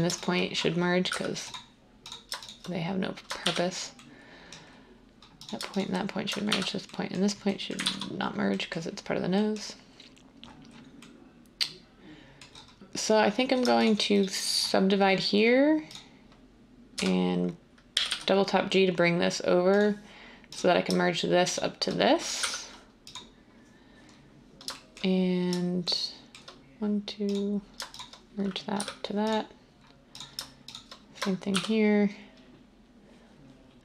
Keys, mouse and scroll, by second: 1.1 m, 3.4 r, 6.5 r, 7.8 ctrl+z, 16.9-17.9 typing, 22.4 m, 28.7 m, 31.5 r.